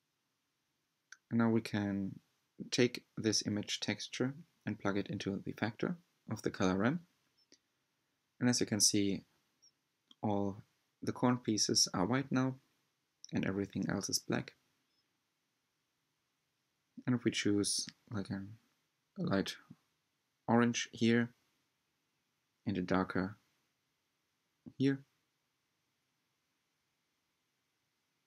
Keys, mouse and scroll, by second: 4.1 click, 4.8-6.0 drag, 8.6-9.5 scroll up 6, 9.5-11.9 middle drag, 11.9-12.2 scroll up 1, 12.2-14.2 shift+middle drag, 14.2-14.7 drag, 14.9 click, 16.7 click, 22.6 drag, 23.3-23.7 drag.